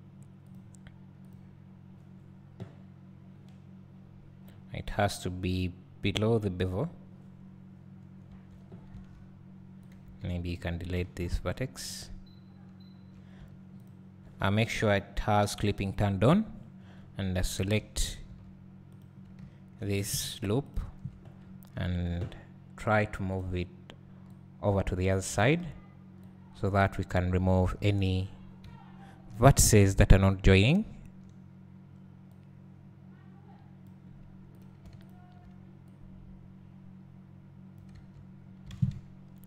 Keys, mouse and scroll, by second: 1.5-9.9 drag, 10.7 x, 11.8 `, 13.8 alt+click, 16.0 click, 16.7 scroll down 1, 19.0 click, 19.4 `, 20.7 alt+shift+click, 21.6 `, 23.4 click, 24.4-30.7 drag, 29.9 scroll up 1, 30.9 `, 32.4-34.6 drag, 36.0-38.1 drag, 38.4-38.7 scroll down 2, 38.7 alt+a.